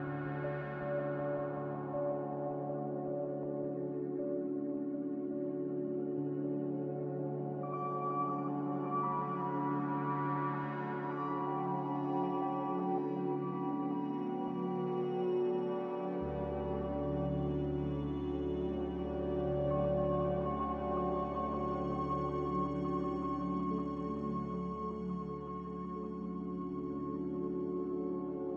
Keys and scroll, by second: 0.0 z, 4.7-5.1 typing, 5.5 Return, 23.5 a.